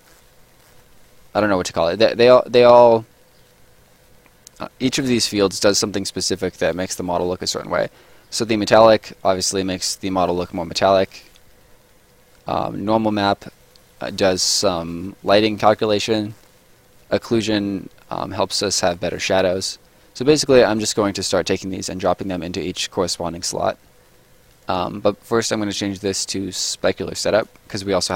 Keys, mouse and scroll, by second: 0.0 right click, 0.4 scroll up 1, 0.5 middle click, 7.2 middle click, 10.2 click, 14.0 middle click, 14.5 scroll down 1, 14.9 middle click, 16.1-18.2 scroll down 2, 16.3 middle click, 18.7 middle click, 24.6 click, 27.3 click.